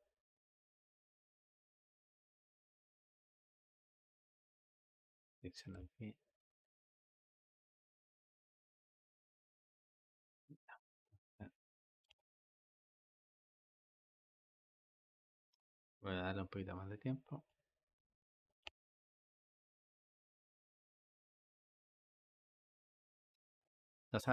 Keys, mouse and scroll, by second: 0.5 click, 1.6 g, 4.3-11.9 drag, 11.9 space, 15.4 Escape, 18.5 space, 23.0 Escape.